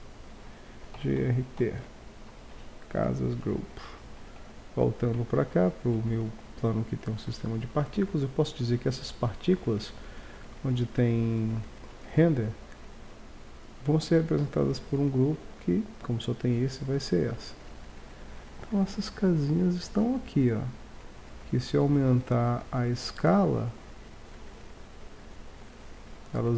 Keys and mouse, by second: 4.4 1, 7.0-7.6 right drag, 22.6-25.1 drag.